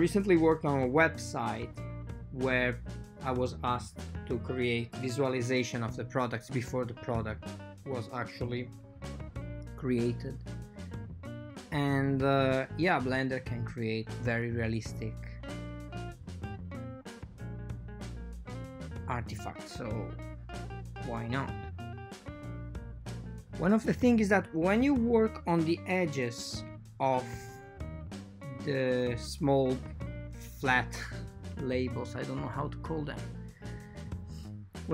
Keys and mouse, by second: 2.8 x, 4.0 k, 6.9 k, 9.5 click, 9.8 shift+click, 10.0 x, 11.4 k, 13.7 k, 14.8 k, 18.2 shift+click, 18.5 x, 20.0-21.3 shift+middle drag, 21.5 ctrl+shift+middle click, 22.0 k, 26.9 right click, 27.5 x, 32.5 right click, 33.0 click, 34.3 x.